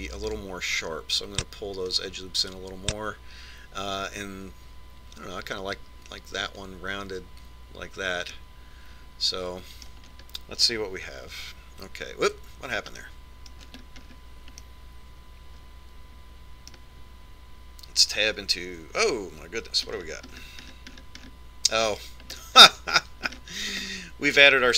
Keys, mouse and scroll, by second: 0.7 ctrl+r, 9.4-11.0 middle drag, 11.2-12.4 middle drag, 12.4 Tab, 13.5 Tab, 14.2-16.5 middle drag, 16.9 middle click, 19.5 Tab, 21.0-24.7 middle drag.